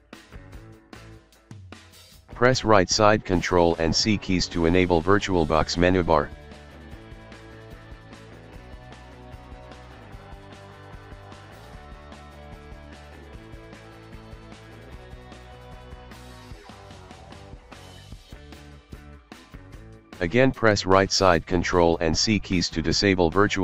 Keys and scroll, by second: 0.1-1.0 typing, 7.6-8.4 typing, 9.6-10.4 typing, 13.1 ctrl+c, 22.0 ctrl+x, 22.2 ctrl+c, 23.2 f.